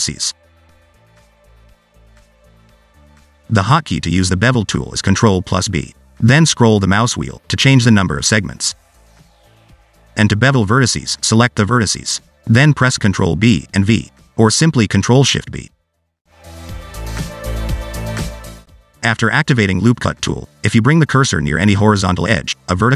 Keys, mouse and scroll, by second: 0.1 click, 1.3 click, 3.6 ctrl+z, 4.5 click, 5.1 middle click, 5.7 2, 6.2 click, 7.1 ctrl+b, 9.9 ctrl+z, 10.7 1, 11.8 ctrl+b, 14.3 ctrl+z, 15.2 ctrl+shift+b, 20.2 click.